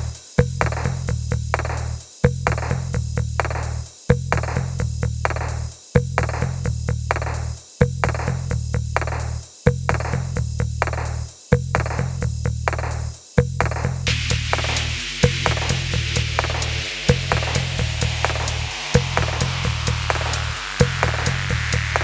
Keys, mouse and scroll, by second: 0.0 shift+click, 0.2 right click, 1.8 middle click, 2.4 scroll up 1, 2.6 middle click, 7.3-7.9 typing, 11.9 middle click, 12.9 scroll up 1, 13.1 middle click, 14.7 typing, 14.7 shift+click, 16.7 right click, 17.7 middle click, 21.3 middle click.